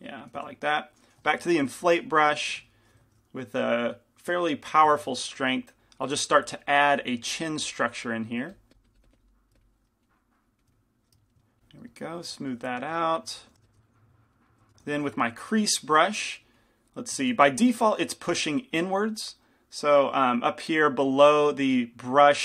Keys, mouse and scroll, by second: 1.8 i, 2.4 f, 4.0 shift+f, 5.6 f, 6.2-11.1 drag, 6.2-7.3 middle drag, 6.4 f, 9.3-10.7 middle drag, 11.8-13.8 drag, 13.6 g, 13.6 f, 14.3 click, 15.1 f, 15.1 shift+c, 16.7-22.4 drag, 17.5 ctrl+z.